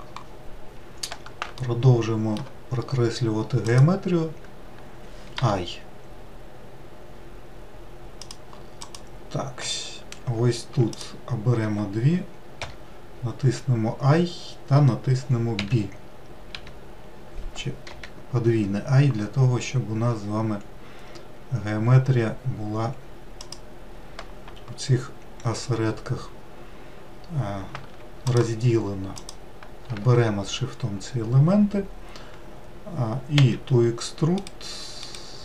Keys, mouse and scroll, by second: 2.0-3.2 shift+middle drag, 3.2-3.7 scroll up 1, 3.7-4.1 scroll up 1, 4.1 click, 5.8 i, 9.3 click, 11.3 shift+click, 13.0 typing, 28.7 shift+click, 29.6 shift+click, 33.8 e.